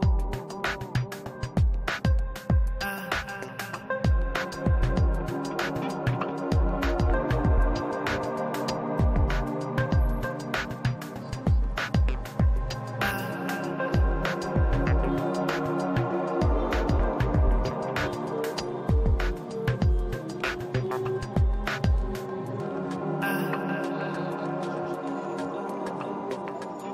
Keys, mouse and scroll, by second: 0.0 click, 0.6 middle click, 1.0 click, 1.6 middle click, 1.8-3.3 middle drag, 3.3 click, 4.3 ctrl+z, 4.4 middle click, 4.7 click, 5.7-6.8 middle drag, 6.2 click, 6.9 ctrl+z, 7.3 click, 8.4-9.7 middle drag, 9.2 click, 10.1-12.6 middle drag, 12.1 f, 12.6 click, 13.5-15.2 middle drag, 15.2 ctrl+z, 15.3 f, 15.6-16.6 middle drag, 16.1 click, 16.7 ctrl+z, 16.9 f, 17.1 middle click, 17.4 click, 18.5 middle click, 18.9 click, 20.1 middle click, 20.5 click, 21.2 ctrl+z, 21.4 click, 22.1-23.8 middle drag, 23.2 f, 23.7-25.4 drag, 24.4 ctrl+z, 25.3-26.9 middle drag, 25.5 click, 26.6 f.